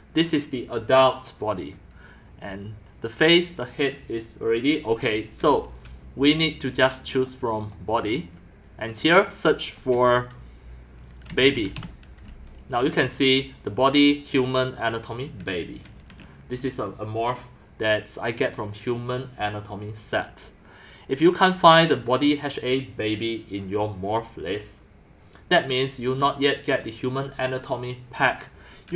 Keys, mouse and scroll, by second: 0.0-1.4 typing, 3.9 typing, 6.4 click, 7.7 click, 8.9 click, 9.4-11.3 drag, 11.1-12.3 typing.